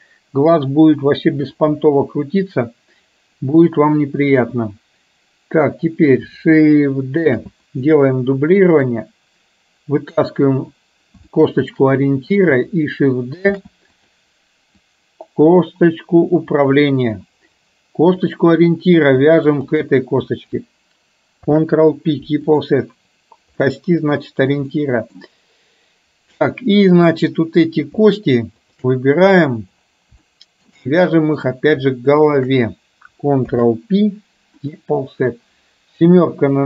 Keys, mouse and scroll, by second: 1.8 KP_7, 7.4 shift+d, 8.9-10.8 drag, 11.3 shift+middle click, 13.6 shift+d, 15.0-16.9 drag, 19.5 shift+click, 21.5 ctrl+p, 23.8 middle click, 24.8 middle click, 28.8 shift+click, 30.4 shift+middle click, 30.9 middle click, 32.3 shift+click, 33.5 ctrl+p, 36.1 KP_7.